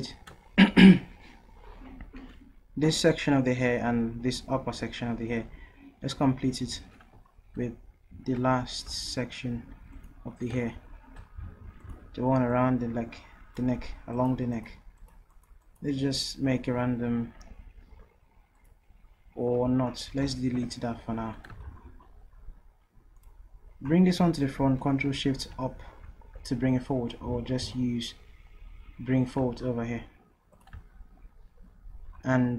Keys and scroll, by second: 8.9 v, 19.7 v, 20.6 Delete, 23.6 typing, 25.5 ctrl+shift+Up.